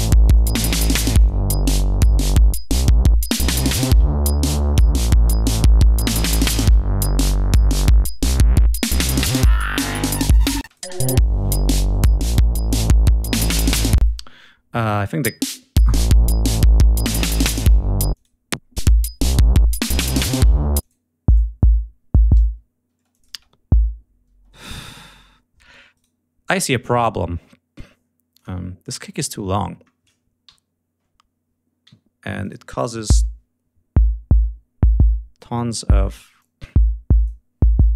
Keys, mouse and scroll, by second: 0.2 click, 1.7 click, 3.7 g, 4.0 ctrl+scroll up 2, 6.9 d, 10.5 space, 10.6 click, 12.7-13.1 scroll up 2, 13.9 space, 14.7 click, 14.9 space, 15.2 scroll down 2, 15.9-16.4 scroll up 2, 18.0 click, 18.7 click, 19.1 scroll down 2, 19.6 click, 20.1 scroll down 2, 20.7 click, 21.2 click, 22.8 space, 23.0 click, 24.2 space, 25.8 right click, 28.2 click, 30.3 l, 31.7 g, 32.3 click, 35.2 click, 36.3 click, 37.6 click.